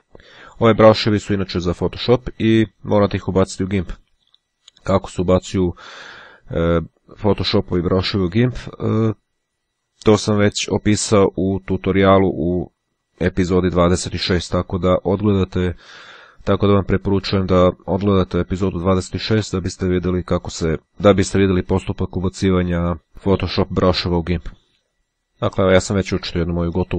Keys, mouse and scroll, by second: 4.6-5.7 drag, 24.7 click.